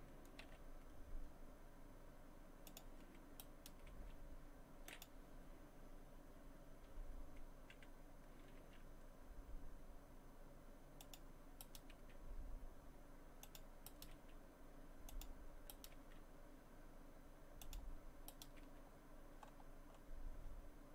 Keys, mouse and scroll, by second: 0.5 g, 3.4 right click, 3.9 g, 8.6 g, 11.6 right click, 11.9 g, 13.9 right click, 14.1 g, 15.7 right click, 16.0 g, 18.3 right click, 18.6 g.